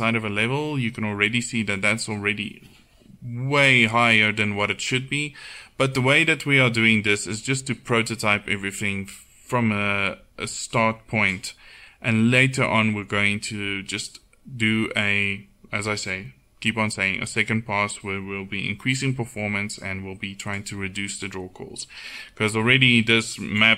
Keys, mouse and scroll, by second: 7.3-22.8 right drag.